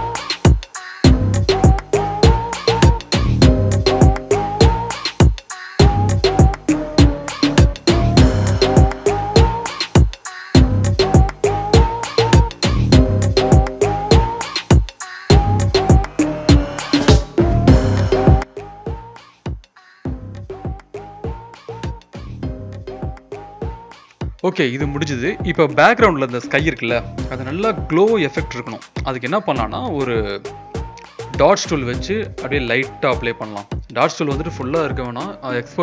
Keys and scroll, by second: 0.6 ], 2.8 ], 2.8 ], 4.1-5.1 typing, 8.1 ctrl+z, 8.2 ctrl+z, 8.4 ctrl+z, 8.5 ctrl+z, 8.6 ctrl+z, 8.6 ctrl+z, 9.9 ctrl+z, 9.9-14.1 typing, 12.9 ctrl+z, 15.4-15.9 [, 17.2 ctrl+-, 17.3 ctrl+-, 17.5-19.2 typing, 19.2 ctrl+z, 21.0 v, 22.1 ctrl+b, 23.8 Return, 24.2 z, 24.3 Escape, 24.3 ctrl+t, 27.2 o, 28.9 o, 29.6 ].